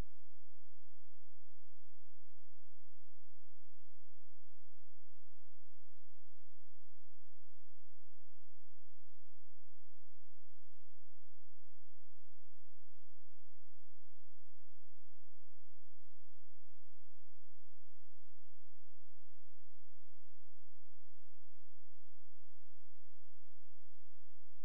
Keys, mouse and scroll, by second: 5.1 space, 7.8 click, 15.4 click, 19.2 click.